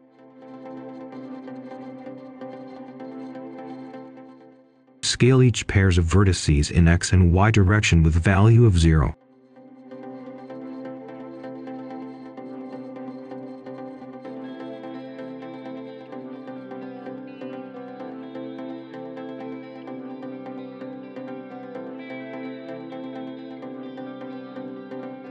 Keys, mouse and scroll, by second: 0.0 right click, 1.1-2.8 scroll up 1, 2.8 click, 5.0-5.7 scroll up 1, 5.9 ctrl+click, 7.5 BackSpace, 7.9 Return, 9.0 click, 9.7 Return, 10.2 click, 10.6-11.3 scroll up 1, 11.5 ctrl+shift+click, 12.2 scroll up 1, 12.4 right click, 13.1-13.9 scroll down 1, 13.9 click, 14.7 Return, 16.5 click, 17.4 Return, 17.9 click, 18.3 scroll up 1, 18.9 ctrl+shift+click, 20.0-20.3 scroll down 1, 20.3-21.3 scroll up 1, 21.3 click, 22.1 Return, 22.6 click, 22.8 Return, 22.8 click, 22.9 scroll down 2, 23.0 right click, 23.2 scroll up 1, 23.5 ctrl+shift+click, 23.7 Escape, 23.8 Tab, 24.0 ctrl+shift+click, 24.2 ctrl+shift+click, 24.8 Return, 25.0 click.